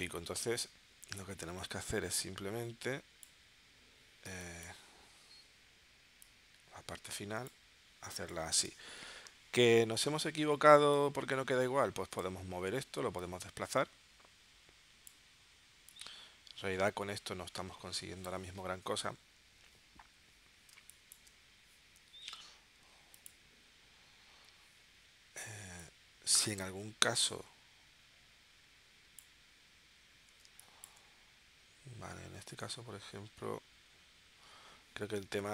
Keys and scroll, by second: 4.3 space, 8.1 space, 20.7 space, 30.5 space.